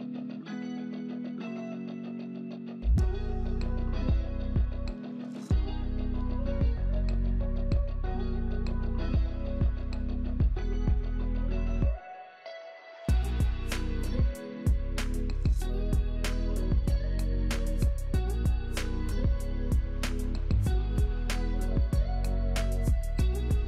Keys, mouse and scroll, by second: 3.7 middle click, 3.8 middle click, 4.6-5.0 scroll up 1, 5.0 middle click, 12.9-15.0 scroll up 3, 15.0-16.0 scroll down 1, 16.0 1, 16.2-16.5 scroll down 2, 16.8 scroll down 1, 22.0 middle click.